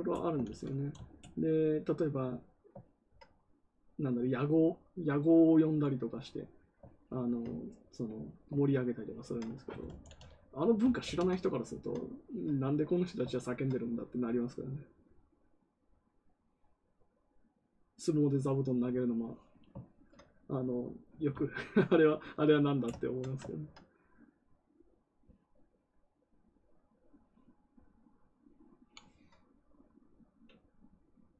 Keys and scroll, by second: 0.3 ctrl+z, 3.4 n, 9.9 ctrl+d, 10.8 ctrl+d.